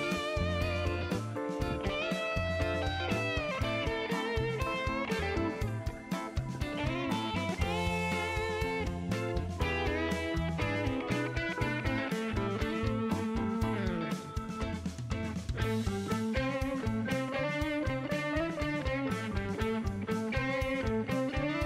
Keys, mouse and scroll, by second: 0.0 shift+right click, 2.7 click, 3.9 scroll up 1, 4.4-5.2 middle drag, 5.3 middle click, 6.2 click, 9.0 click, 9.8 click, 10.4 right click, 12.7 click, 14.7 click, 16.9 click, 18.3 click, 18.9 right click, 20.8 click, 21.5 click.